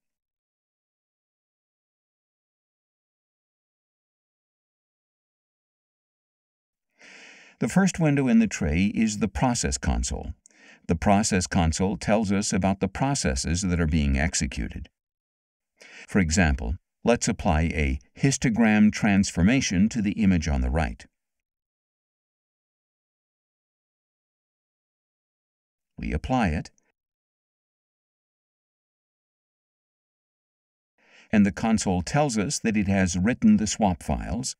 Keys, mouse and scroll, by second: 1.1 click, 2.3 click, 3.5 click, 17.4 click, 21.1 click, 23.4-24.9 drag, 26.3 click, 29.4 click, 33.6-34.5 drag.